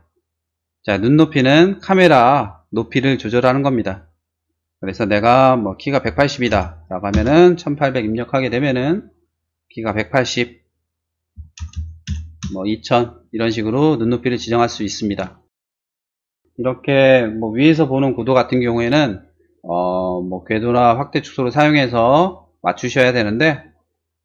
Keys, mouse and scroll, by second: 6.1-6.5 typing, 7.2 Return, 11.4-12.1 typing, 12.4 Return, 15.4 shift+middle click, 16.0 shift+middle click, 17.0 middle click, 22.4 shift+middle click.